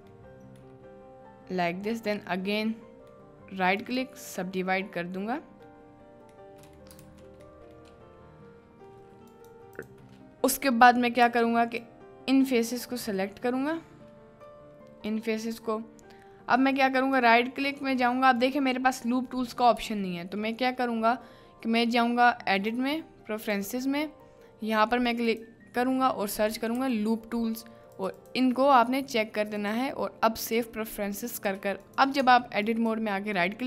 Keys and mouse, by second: 0.6-2.0 middle drag, 2.4 middle click, 3.8 click, 4.6 middle click, 6.4 middle click, 6.6 click, 7.1 ctrl+z, 7.6 click, 9.3 click, 11.2 3, 12.1 click, 16.7 click, 19.8 Tab, 22.7-23.6 drag, 32.2 Tab, 32.8-33.6 drag.